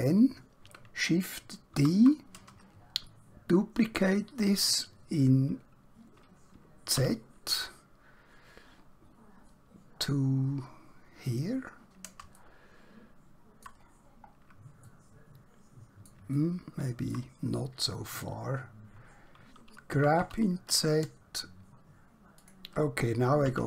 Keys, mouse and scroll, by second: 1.8 shift+d, 2.6-3.1 scroll down 1, 6.9 z, 11.3 click, 12.5 middle click, 14.0 scroll down 1, 14.9 middle click, 16.4 shift+middle click, 19.9 g, 20.2 z, 22.4 click, 23.4 KP_1.